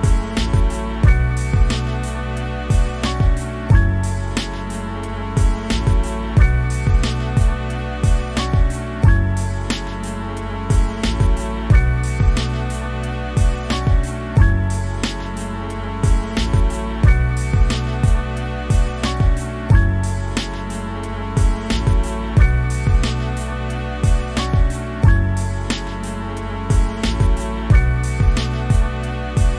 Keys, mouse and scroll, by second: 2.6 scroll up 1, 3.1 click, 3.8 scroll down 3, 3.9 shift+middle click, 4.0 scroll up 1, 4.1 f, 4.3 middle click, 4.5-5.9 drag, 5.9 scroll down 2, 6.1 shift+middle click, 6.1 scroll up 1, 6.3 click, 6.9 scroll down 1, 7.0 middle click, 7.2 scroll up 1, 7.3 click, 7.5 shift+middle click, 7.7 f, 7.8 click, 8.1 middle click, 8.2 click, 8.5 shift+middle click, 8.6-9.1 scroll down 2, 8.6 click, 9.1 shift+middle click, 9.2 scroll up 1, 9.4 click, 10.2 shift+middle click, 10.4 scroll up 1, 10.6 click, 11.0 scroll down 2, 11.1 middle click, 11.5 scroll up 1, 11.6 click, 11.8 shift+middle click, 12.6 click, 12.9 shift+middle click, 13.0 f, 13.2 click, 13.4 scroll down 2, 13.5 shift+middle click, 13.6 scroll up 1, 13.7 click, 14.0 shift+middle click, 14.2-14.7 scroll down 2, 14.3 click, 14.7 middle click, 15.2 scroll up 1, 15.4 click, 15.6 middle click, 16.2 scroll down 1, 16.3 middle click, 16.7 middle click, 16.9 scroll up 1, 17.0 click, 17.4 scroll down 1, 17.5 shift+middle click, 18.0 click, 19.0 shift+middle click, 19.1-21.3 drag, 21.3 middle click, 21.6 scroll up 1, 21.8 click, 22.0-22.7 scroll down 2, 22.2 shift+middle click, 22.3 click, 23.0-24.2 middle drag, 24.2-25.3 drag, 25.4 middle click, 25.6 f, 25.8 scroll up 1, 26.0-27.2 drag, 27.2 shift+middle click, 27.3 click, 28.1 shift+middle click, 28.2 click, 28.8 shift+middle click, 29.2 scroll up 1, 29.3 click.